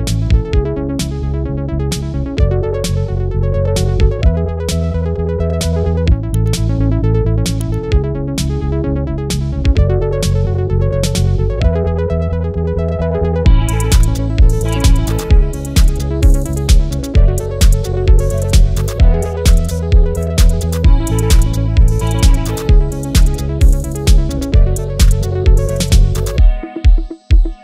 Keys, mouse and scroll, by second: 3.6 typing, 4.4-12.3 drag, 15.5 typing, 15.8 click, 22.4 click, 22.4 typing, 22.6-27.6 drag.